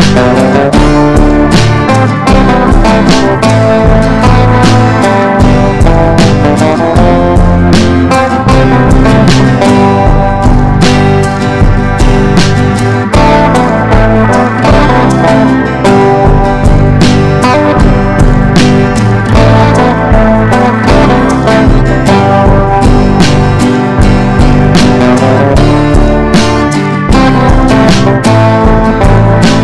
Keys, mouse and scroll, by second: 1.1 shift+click, 1.9-8.4 drag, 8.8 ctrl+g, 9.5-11.9 ctrl+drag, 12.5 ctrl+d, 12.8-13.9 drag, 14.3 ctrl+d, 14.6 ctrl+d, 14.8 typing, 15.3 click, 15.7 shift+click, 15.9 shift+click, 16.2 shift+click, 16.4 shift+click, 17.1 click, 18.1 ctrl+g, 19.0 click, 22.6 Down, 22.8 typing, 24.9 typing, 25.0 click, 25.7 ctrl+shift+g, 26.5 click, 27.2 ctrl+shift+g, 27.5 scroll up 1, 27.8 click, 28.3 ctrl+shift+g, 29.0 click, 29.5 ctrl+shift+g.